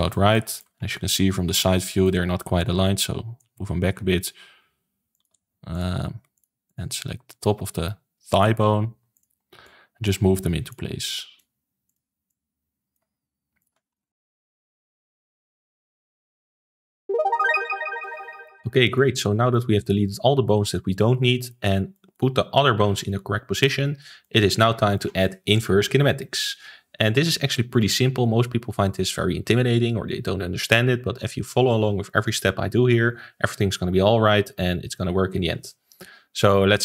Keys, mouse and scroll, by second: 1.0 KP_3, 1.4-1.8 scroll down 3, 1.8 shift+middle click, 2.6 click, 3.9 r, 5.3 ctrl+z, 5.6 click, 6.3 click, 6.6 click, 7.3 click, 9.1 click, 9.6 click, 10.6 click, 11.0 click, 11.8 click, 12.2 click, 13.5 click, 13.9-14.2 scroll down 2, 14.2 click, 14.5 middle click, 15.1 Tab, 15.5 ctrl+s, 15.8-16.2 shift+middle drag, 16.2 click, 16.6-17.0 middle drag, 18.1-19.7 middle drag, 19.7-20.6 scroll down 1, 20.6-27.7 middle drag, 36.3 click.